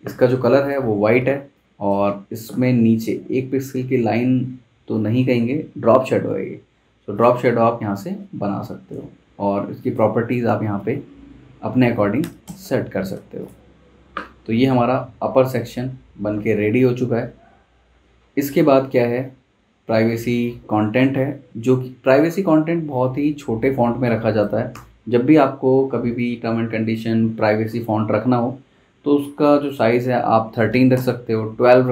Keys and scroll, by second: 0.3 i, 1.3 space, 10.5 1, 11.1 Tab, 12.2 3, 12.4 Return, 13.1 v, 23.8 z, 24.7 v, 30.3-31.2 typing.